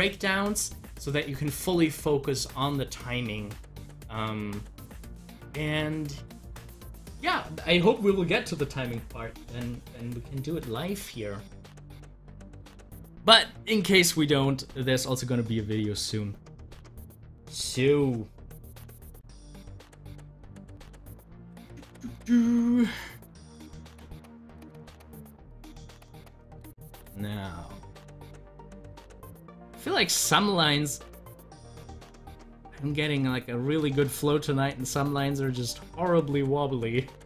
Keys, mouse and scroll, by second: 9.8 click, 17.3 double click, 22.8-24.1 drag, 24.1 ctrl+z, 25.8 ctrl+z, 30.0 ctrl+z, 31.8 ctrl+z, 33.9 ctrl+z.